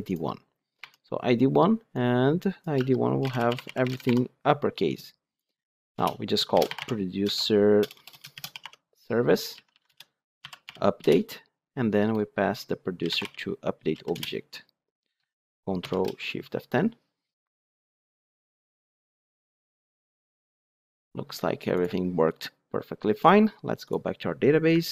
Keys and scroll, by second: 0.0 Return, 9.8 Return, 15.7 ctrl+shift+F10.